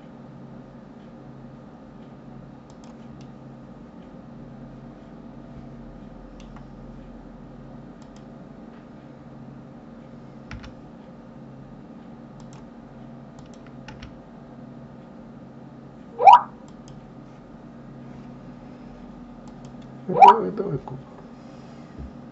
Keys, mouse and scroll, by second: 3.1-6.1 middle drag, 7.8 click, 10.4 g, 13.2 click, 13.7 g.